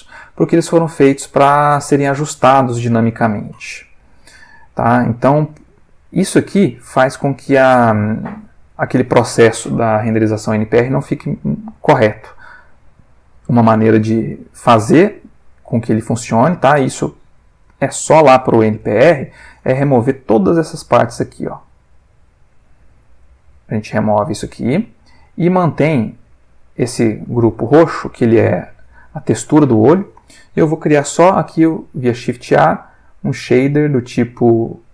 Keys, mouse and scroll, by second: 1.8-3.0 drag, 3.1 ctrl+middle click, 3.8-5.1 ctrl+middle drag, 5.3 ctrl+middle click, 6.0 ctrl+middle click, 13.8-14.4 drag, 14.8-15.5 drag, 18.3 g, 18.8 click, 19.4-21.1 drag, 21.3 g, 22.6 click, 23.2 x, 24.1-25.1 drag, 25.2 click, 25.8 click, 26.9 click, 27.2-29.1 ctrl+middle drag, 30.1 click, 32.1 shift+a.